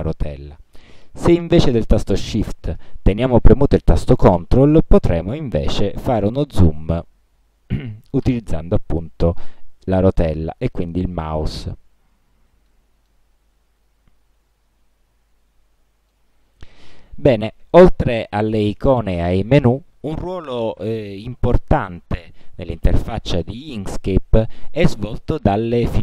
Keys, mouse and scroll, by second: 0.8 shift+scroll down 2, 5.1 ctrl+scroll up 1, 5.7 ctrl+scroll down 2, 6.4-6.8 ctrl+scroll up 2, 7.0-7.4 ctrl+scroll up 2, 7.5 ctrl+scroll down 2, 8.1 ctrl+scroll down 2, 8.7 ctrl+scroll down 2, 9.4 ctrl+scroll up 2, 10.0 ctrl+scroll down 2, 10.9 ctrl+middle click, 11.8 ctrl+scroll up 2, 12.3 ctrl+scroll down 2, 12.9 ctrl+middle click, 13.6 ctrl+scroll up 1, 14.2 scroll down 2, 14.6-15.1 ctrl+scroll up 3, 16.3 ctrl+middle click.